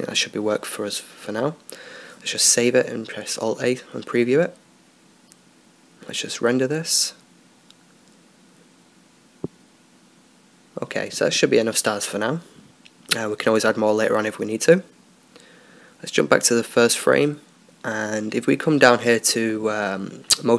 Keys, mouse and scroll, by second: 0.4 middle click, 1.2 middle click, 1.7 alt+a, 5.5-20.5 drag, 14.2 Escape, 16.5 Escape.